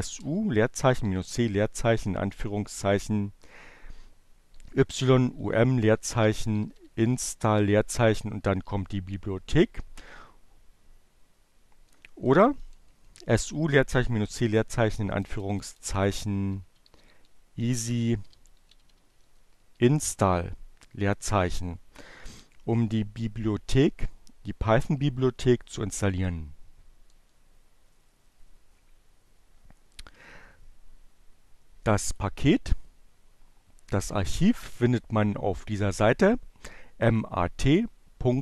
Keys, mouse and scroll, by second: 0.1-3.9 typing, 5.3-7.0 typing, 10.7 BackSpace, 13.3 BackSpace, 15.7-19.4 typing, 26.1 BackSpace, 31.6 click, 33.7-36.2 drag.